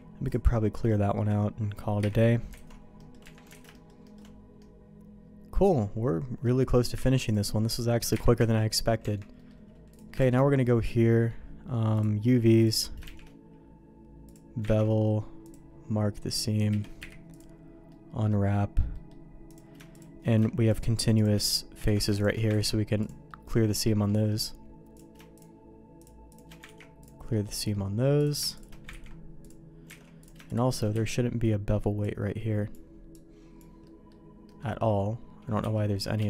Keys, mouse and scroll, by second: 0.0 ctrl+e, 0.5 middle click, 1.1 middle click, 2.0 KP_Divide, 2.6 alt+a, 2.9 middle click, 3.2 Tab, 3.6 alt+a, 3.7 shift+middle click, 4.0 shift+middle click, 4.6-6.4 middle drag, 7.0 ctrl+s, 7.2 click, 8.1 KP_Divide, 9.0 Tab, 9.3 middle click, 9.9 click, 10.2 shift+g, 13.3 shift+g, 14.8 ctrl+e, 16.1 middle click, 16.7 a, 17.0 u, 17.9 middle click, 18.9 middle click, 19.4 click, 19.9 shift+click, 20.7 shift+click, 21.8 ctrl+z, 22.7 ctrl+e, 23.3 middle click, 23.8 middle click, 24.3 middle click, 25.3 shift+click, 26.0 shift+click, 26.6 ctrl+e, 27.3 middle click, 28.1 click, 29.1 ctrl+e, 30.2 alt+a, 30.2 click, 30.5 shift+click, 30.9 q, 32.0 click, 33.1 click, 33.8 middle click, 34.4 middle click, 35.6 b.